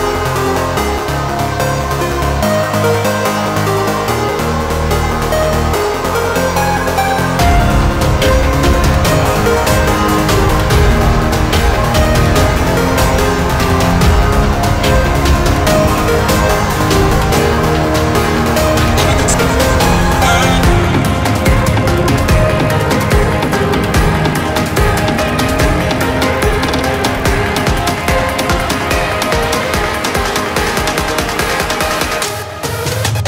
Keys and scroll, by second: 5.7 Delete, 7.8 Delete, 22.4 ctrl+z, 24.1 ctrl+t, 25.5 ctrl+z.